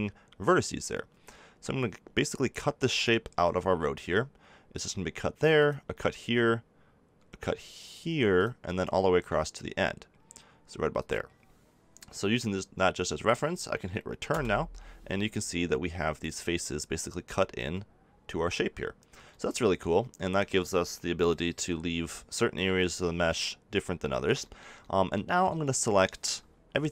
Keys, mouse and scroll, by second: 17.5 z, 21.5 KP_7, 22.6 z, 23.2-24.4 middle drag, 24.4 click, 25.4 z.